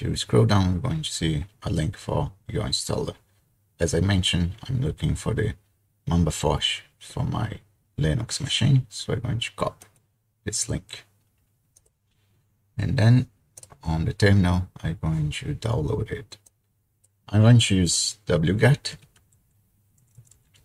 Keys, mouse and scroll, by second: 3.2-4.8 scroll down 2, 4.8-6.6 scroll down 1, 10.0 click, 11.8-15.3 drag, 16.5-17.9 drag, 18.7-20.6 typing.